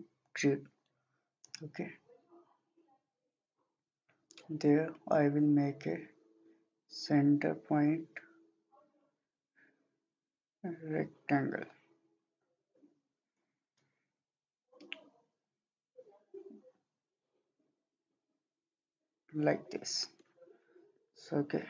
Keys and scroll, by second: 21.0 Escape.